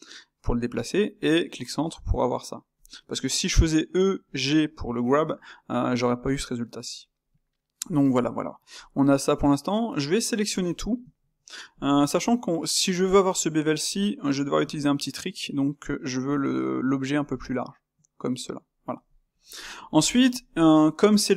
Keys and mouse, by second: 7.2-10.7 middle drag, 10.7 a, 11.0 a, 11.4-14.6 middle drag, 14.6 s, 17.4-21.3 middle drag.